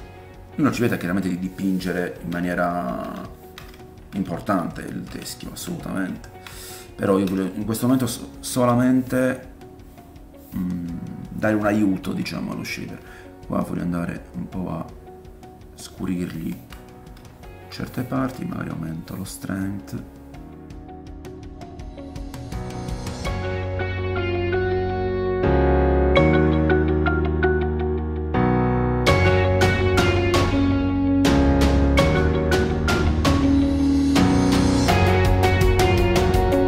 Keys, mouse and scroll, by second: 1.6 middle click, 2.3 middle click, 2.4 ctrl+click, 2.6-5.6 ctrl+middle drag, 5.6-8.9 drag, 7.0 shift+middle click, 7.5 ctrl+middle click, 8.9-13.4 middle drag, 12.0 f, 13.4-36.6 drag, 16.2 shift+middle click, 16.8 middle click, 17.3 ctrl+middle click, 22.2 middle click, 23.3 ctrl+middle click, 24.0 shift+middle click, 25.8 ctrl+middle click, 26.0 middle click, 26.1 shift+middle click, 26.3 middle click, 28.5 ctrl+middle click, 29.3 middle click, 29.8 shift+middle click, 32.0 middle click, 32.1 shift+middle click, 33.3 ctrl+middle click, 33.8 shift+middle click, 33.8 middle click, 35.0 middle click, 35.6 middle click, 35.9 middle click.